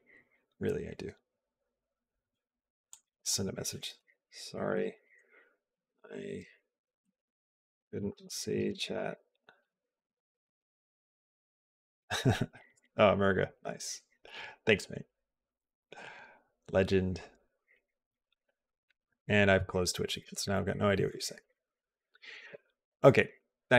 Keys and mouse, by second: 21.5 click, 22.2 click.